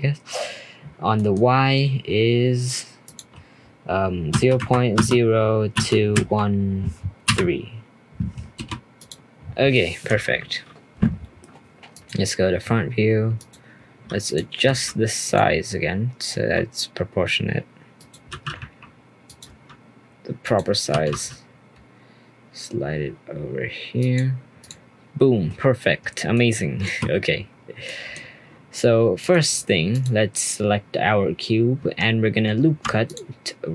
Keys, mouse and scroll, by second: 1.1-3.0 middle drag, 3.0-6.2 drag, 9.5 scroll down 1, 9.7-10.2 middle drag, 10.2-11.9 scroll up 1, 11.9 click, 13.4-14.3 drag, 14.6 s, 15.5-16.3 scroll up 1, 16.3 scroll up 2, 16.3 s, 18.3 g, 19.5 s, 20.9 g, 24.6 click, 26.3 middle click, 27.1-27.5 scroll up 1, 27.5-27.8 scroll down 1, 27.8-29.2 middle drag, 29.2 click, 29.9 click, 31.8 Tab, 32.2-32.6 scroll up 1, 32.6 ctrl+r.